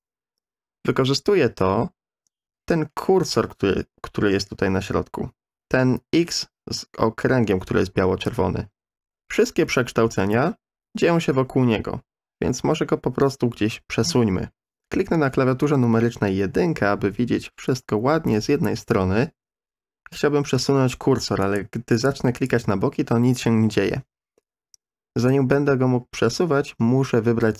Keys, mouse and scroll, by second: 15.6 KP_1, 21.4 click, 22.0 click.